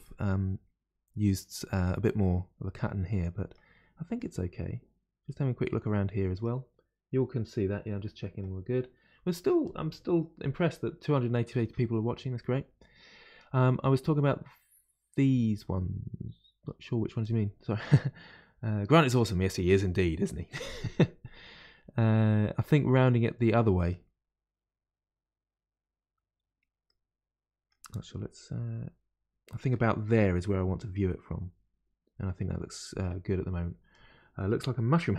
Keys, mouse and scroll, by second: 3.2-12.3 middle drag, 26.9-32.7 middle drag.